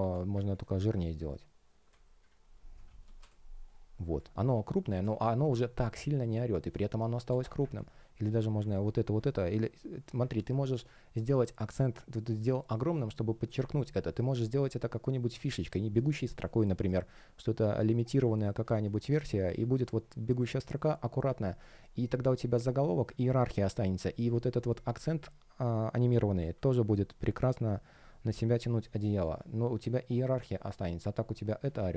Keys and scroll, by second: 3.1 Return, 4.9 space, 10.6 space, 14.0 shift+p, 14.3 space, 21.9 space, 25.1 super+z, 27.9 space.